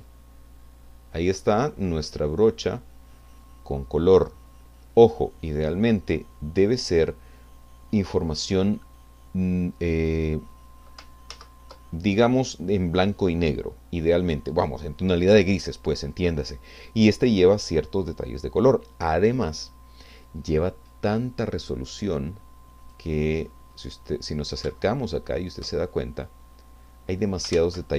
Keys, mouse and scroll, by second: 1.2-1.5 scroll down 2, 1.8 middle click, 11.6 ctrl+z, 22.8 click, 23.4-23.9 scroll up 2, 24.8 shift+middle click, 27.8 ctrl+z.